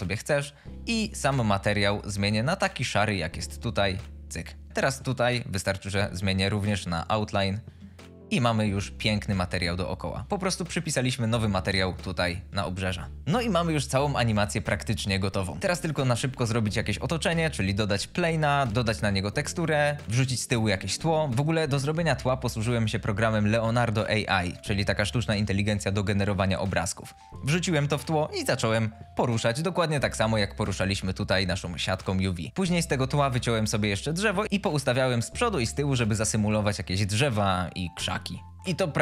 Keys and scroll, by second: 11.7 space.